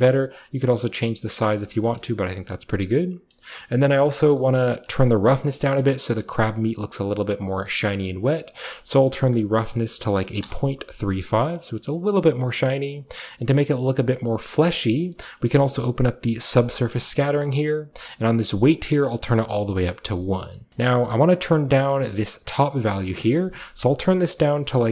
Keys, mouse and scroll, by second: 0.4 click, 1.5-3.1 scroll down 1, 2.3 a, 2.7 a, 4.7 typing, 4.9 middle click, 5.0-5.7 scroll up 1, 5.7-8.5 scroll up 1, 5.8-6.2 middle drag, 6.4-8.5 middle drag, 8.5-10.4 drag, 10.4 Return, 10.4 typing, 11.6 middle click, 12.3-12.9 scroll up 1, 12.9-13.6 scroll down 1, 13.6 click, 15.5-16.6 middle drag, 16.6 click, 18.9 click, 20.7-22.4 scroll up 1, 23.2 click.